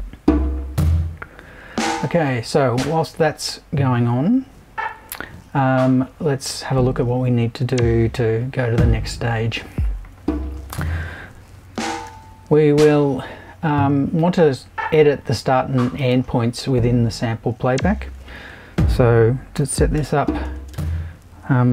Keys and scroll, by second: 12.1 shift+super+b, 18.4 super+i, 19.5-20.7 typing.